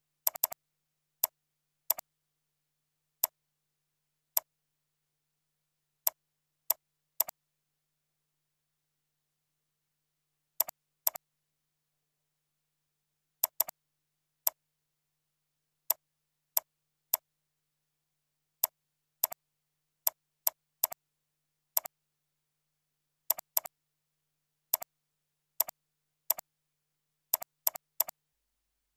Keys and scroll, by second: 2.4 ctrl+Tab, 4.5 ctrl+q, 4.9 ctrl+z, 5.4 ctrl+Tab, 9.1 ctrl+Tab, 20.8 ctrl+c, 20.9 ctrl+a, 21.3 ctrl+v, 22.2 ctrl+shift+., 23.1 ctrl+b.